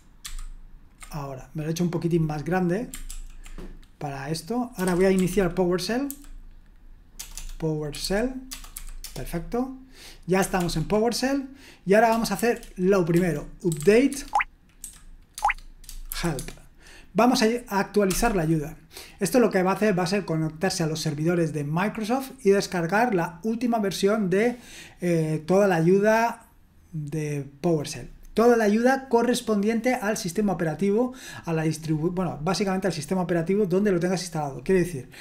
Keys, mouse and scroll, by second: 0.2 ctrl+*, 3.1 ctrl+l, 4.5-6.1 typing, 7.1-8.7 typing, 9.0 Return, 10.5 ctrl+l, 13.1-14.8 typing, 15.3 Tab, 16.1 shift+h, 16.4 Tab, 18.0 Return.